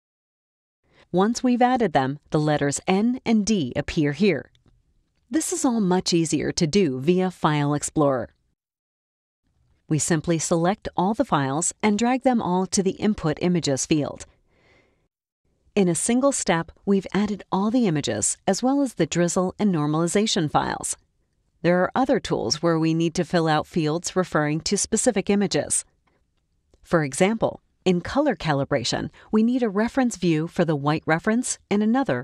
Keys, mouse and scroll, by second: 0.2 shift+click, 1.1 click, 2.8 click, 4.2 click, 6.6 click, 10.2-15.2 drag, 25.7 click, 27.9 click, 30.9 click.